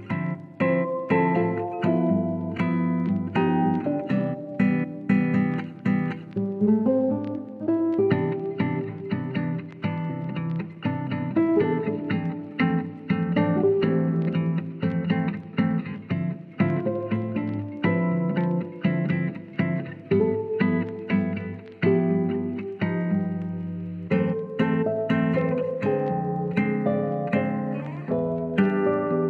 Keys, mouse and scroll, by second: 3.3-4.3 drag, 5.0 shift+middle click, 5.4 click, 6.1 click, 7.0 click, 8.0 g, 9.4 click, 10.0-11.2 drag, 11.4 shift+middle click, 12.7 g, 13.3 click, 13.5 ctrl+z, 13.9 click, 14.5 g, 15.3 click, 15.7 click, 15.9 g, 16.2 click, 16.5-17.6 drag, 18.0-19.9 drag, 19.9 g, 20.7 click, 21.1 click, 22.6 KP_3, 23.7 Tab, 24.9 shift+middle click, 25.2 Tab, 25.8 click, 26.8 click, 28.9 s, 29.1 y.